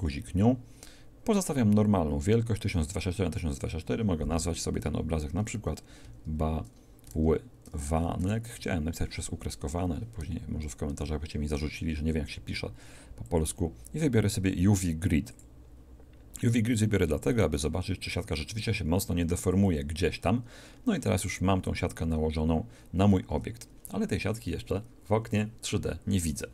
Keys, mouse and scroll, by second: 0.0 click, 20.6-23.2 middle drag, 23.2 Tab.